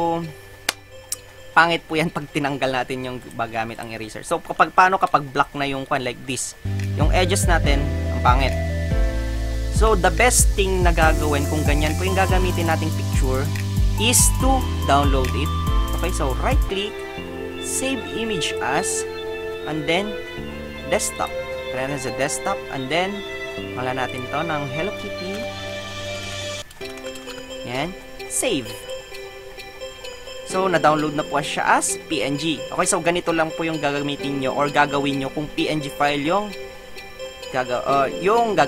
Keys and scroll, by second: 9.9 ctrl+alt+z, 11.6 Delete, 12.2 alt+Delete, 12.5 Tab, 25.2-27.9 typing.